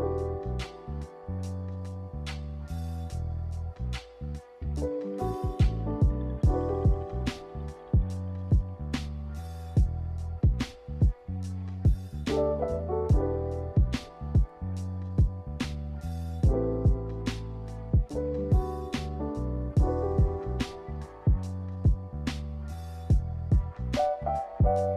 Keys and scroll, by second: 3.6 a.